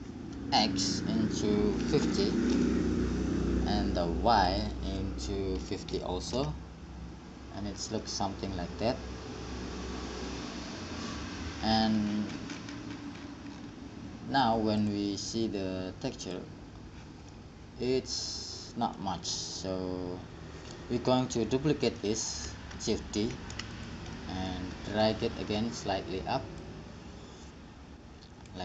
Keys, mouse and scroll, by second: 4.7-6.9 drag, 8.5-9.7 middle drag, 15.4-19.5 drag, 22.2 click, 23.5 shift+d.